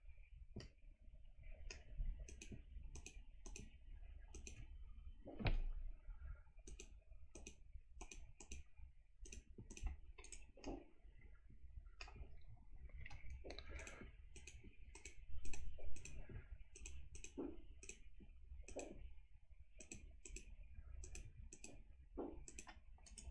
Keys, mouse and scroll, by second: 0.0 scroll down 1, 0.6-1.8 middle drag, 2.3 shift+click, 3.1 shift+click, 3.6 shift+click, 4.3 shift+click, 5.4 c, 7.5 click, 8.6 click, 9.3 click, 9.8 click, 10.3 right click, 10.7-12.2 middle drag, 13.0 c, 14.4 click, 15.0 click, 15.6 click, 16.1 click, 16.9 click, 17.3 click, 17.9 click, 18.8 click, 19.9 click, 20.3 click, 21.1 click, 21.6 click, 22.6 click, 23.1 right click.